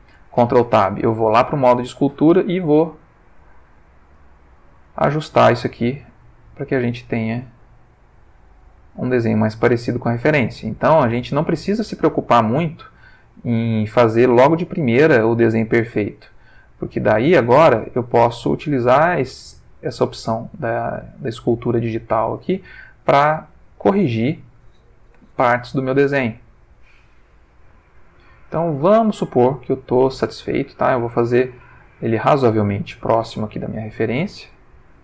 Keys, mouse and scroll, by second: 0.2 ctrl+Tab, 1.3 click, 2.7 click, 3.6 click, 4.1-4.6 drag, 4.9-5.6 drag, 5.9-6.7 drag, 6.8 click, 7.4-8.4 drag, 8.6-9.5 drag, 10.8-11.3 drag, 11.6 click, 12.7 click, 13.6 click, 14.9-16.3 drag, 16.6 click, 17.5 f, 18.0 click, 19.2-20.0 drag, 20.7 click, 22.6-23.8 drag, 24.0 click, 25.3-25.9 shift+middle drag, 26.3 click, 27.1-28.2 drag, 28.3 click, 29.1-29.6 drag, 29.8-30.5 drag, 30.6 click, 31.3 click, 32.4-33.3 drag, 33.5-34.8 drag, 34.9-35.0 drag.